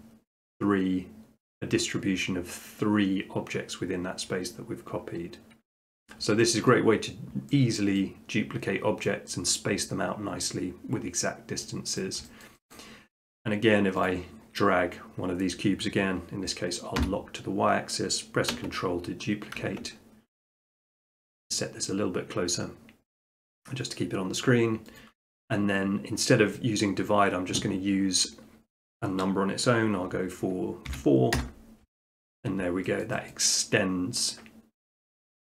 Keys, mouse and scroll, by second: 5.0-6.1 middle drag, 6.7 middle click, 8.0 middle click, 9.3 middle click, 12.0 middle click, 12.5 shift+middle click, 12.8 middle click, 14.1 click, 17.0 y, 25.0-26.1 drag, 30.9 4, 31.4 Return, 32.1 middle click, 32.4 middle click, 33.1 shift+middle click, 33.3 middle click.